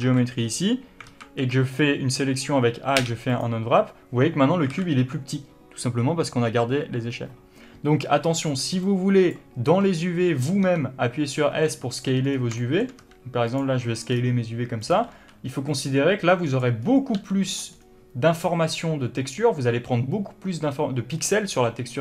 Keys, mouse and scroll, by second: 0.3 alt+a, 5.0 alt+a, 10.7 scroll up 1, 10.9 s, 12.3 click, 12.6 scroll down 1, 12.9 shift+middle click, 13.3 s, 13.9 click, 14.4-14.8 scroll down 1, 14.8 s, 15.2 click, 15.4 g, 16.1 click, 16.5 s, 16.9 click, 17.1 scroll up 1, 17.4 g, 17.9 click, 18.0 scroll up 1.